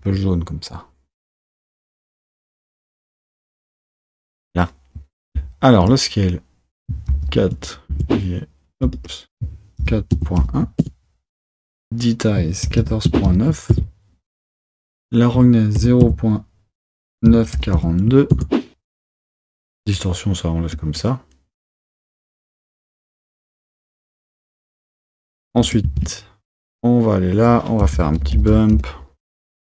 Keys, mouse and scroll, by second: 2.0 click, 2.8 click, 3.0 click, 3.1 click, 3.4 click, 10.9-13.8 drag, 20.8-28.9 drag, 28.9 shift+a.